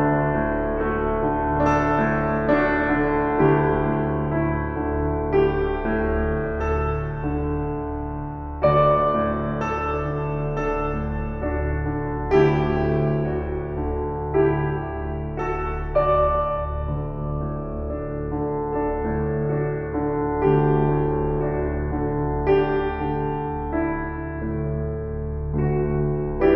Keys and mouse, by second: 0.2 shift+click, 1.1 ctrl+alt+click, 2.8 alt+shift+click, 4.3 click, 5.9 alt+click, 7.3 click, 8.5 click, 8.7 click, 9.7-11.2 drag, 11.8 click, 12.0 click, 13.8 click, 14.5 click, 17.5-18.2 alt+shift+drag, 19.2 click, 20.1 click, 21.3 click, 22.5-23.1 alt+shift+drag, 23.9 ctrl+s.